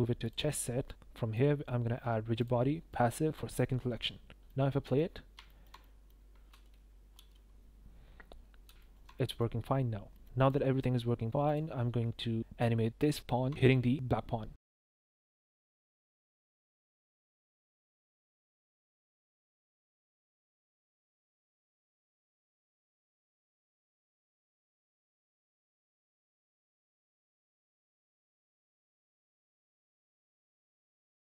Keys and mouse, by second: 2.4-2.9 drag, 4.3 space, 4.4-4.9 drag, 5.4 shift+middle drag, 5.8 middle click, 7.1 space, 8.6 space, 8.8 shift+drag, 9.1 drag, 10.1 click, 10.3 click, 11.5-12.0 drag, 14.5-14.9 drag, 15.3 click, 15.8 i, 16.1-16.6 drag, 16.9 shift+click, 17.5-19.8 typing, 20.9 click, 21.2 s, 21.8 click, 22.3 click, 22.6 click, 22.7 space, 23.0 space, 23.2 click, 23.3 g, 23.7 click, 24.1 click, 24.4 click, 24.5-26.9 typing, 26.6 click, 27.0-28.1 drag, 28.3 click, 28.5 s, 28.7 click, 28.9 s, 29.6 click, 29.9 s, 30.0 s, 30.8 click.